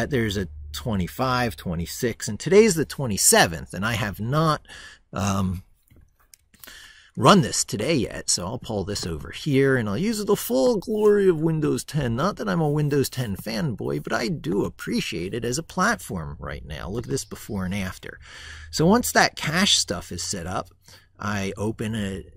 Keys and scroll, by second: 6.2 super+Tab.